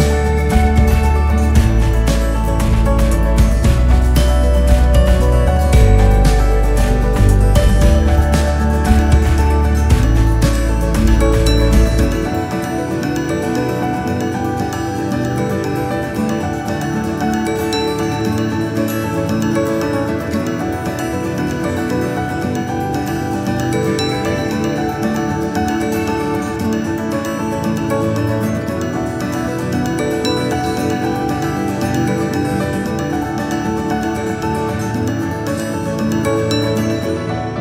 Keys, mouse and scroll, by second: 0.6 alt+click, 1.3 alt+click, 2.7 alt+click, 3.3 alt+click, 4.5 g, 9.3 click, 10.6 click, 11.4 click, 12.9 ctrl+r, 15.4 g, 20.0 click, 20.4-20.9 scroll down 2, 20.9-22.5 scroll up 1, 23.1-24.1 drag, 24.6 click, 24.9-28.1 right drag, 28.1 click, 30.0-34.2 drag, 34.2-34.5 scroll up 2, 34.5-36.1 drag, 36.1-36.9 scroll down 1, 36.9 click.